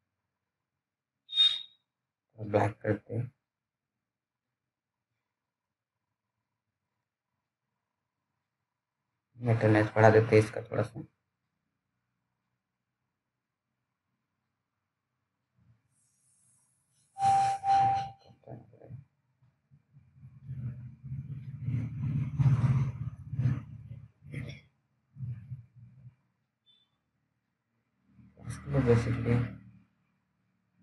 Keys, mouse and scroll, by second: 13.9 click, 25.1 click.